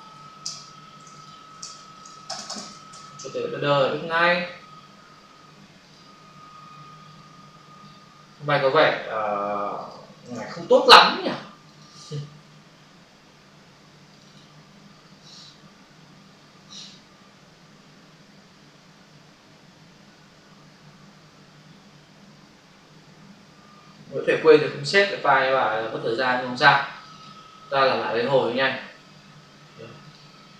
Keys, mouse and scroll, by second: 0.4 ctrl+space, 1.2 click, 1.6 ctrl+space, 2.1 double click, 2.2 space, 5.8 click, 9.7 click, 10.2 right click, 11.7 click, 12.2 F5, 14.1 click, 14.2 double click, 27.4 double click, 30.0 click.